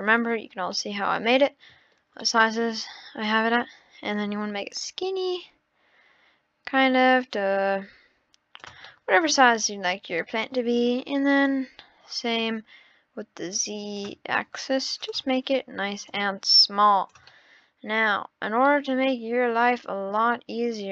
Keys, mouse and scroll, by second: 0.7-1.8 middle drag, 1.8 scroll up 2, 2.2-3.2 middle drag, 3.2 click, 8.9-9.8 middle drag, 9.8-10.2 scroll down 4, 10.2 middle click, 10.7 scroll up 3, 11.4 click, 15.0-16.2 drag, 17.3-18.1 middle drag, 18.1-18.4 scroll up 4, 18.7-19.6 middle drag, 20.5-20.9 scroll up 6.